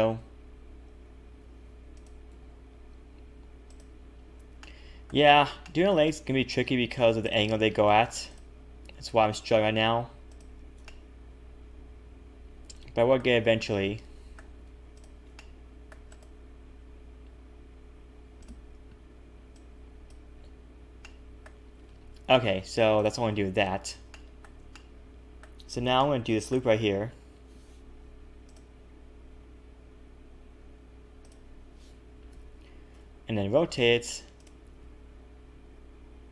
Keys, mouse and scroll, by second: 2.3 a, 2.4 a, 3.7 click, 4.6 shift+middle click, 5.3-5.6 scroll up 2, 5.6 shift+middle click, 7.2 click, 7.9 scroll up 2, 8.3 alt+shift+click, 10.8 middle click, 13.4-13.8 scroll up 2, 13.6 middle click, 14.9 alt+shift+click, 15.3 middle click, 16.1 right click, 19.5 click, 21.0 middle click, 21.7 a, 22.5 a, 22.9 click, 23.4-24.1 scroll down 7, 24.1 shift+middle click, 24.7 middle click, 26.0 shift+middle click, 27.3 ctrl+r, 32.3 KP_1, 32.9 r, 34.7 g.